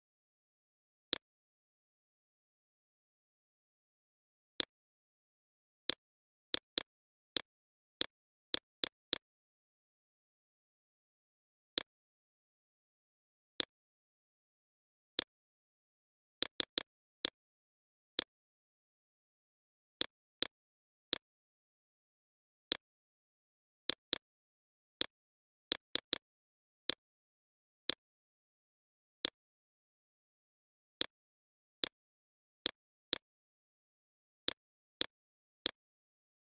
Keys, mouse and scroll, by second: 0.4 click, 7.6-17.0 drag, 20.2 BackSpace, 21.2 click, 23.7-27.5 drag, 31.3 click.